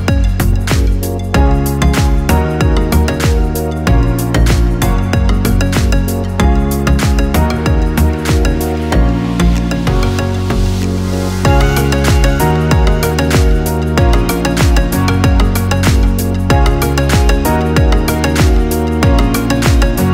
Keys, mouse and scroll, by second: 3.0-5.6 drag, 5.6 right click, 6.2 right click, 6.5 r, 7.7 right click, 8.2 right click, 8.6 r, 9.6 right click, 9.8 r, 10.9 middle click, 11.4 right click, 12.6-14.8 drag, 14.8-16.2 middle drag, 16.2-17.3 drag, 17.3 middle click, 17.8 right click, 18.4 click, 19.3-20.1 middle drag.